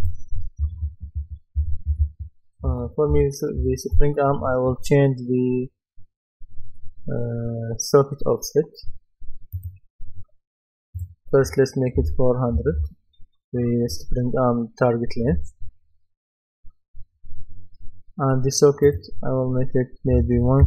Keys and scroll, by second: 0.4-3.6 typing, 12.0 KP_4, 12.6 KP_0, 15.3 Return, 20.2 KP_1, 20.4 KP_5.